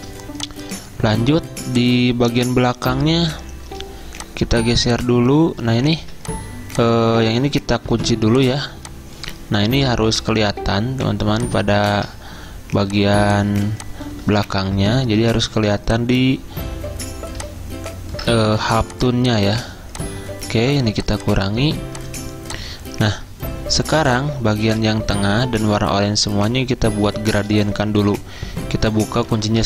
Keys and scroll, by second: 6.1 ctrl+z, 8.0 ctrl+2, 10.0 ctrl+z, 13.1 z, 14.2-15.0 typing, 29.1 alt+2.